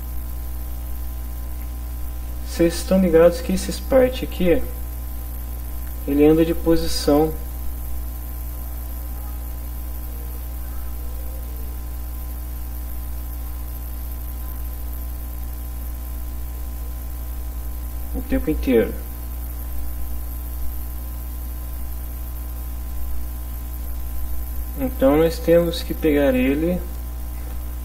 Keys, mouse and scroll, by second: 1.5 Return, 4.6 click, 6.9-19.7 drag, 22.9 click, 26.3 click.